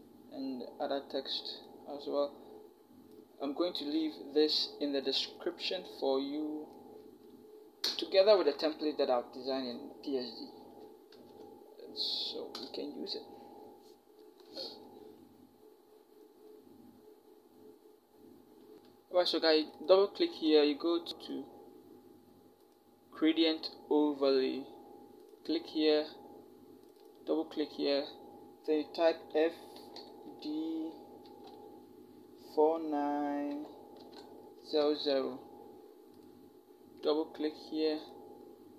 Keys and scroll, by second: 7.7 Return, 8.2 Right, 10.9 ctrl+t, 12.4 Return, 29.6 f, 31.0 d, 33.3-34.6 typing.